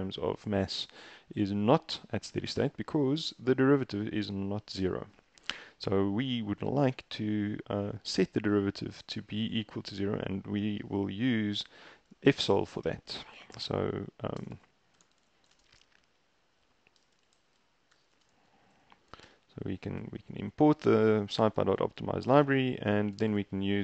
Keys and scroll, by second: 13.3-19.4 typing, 22.3-23.3 typing.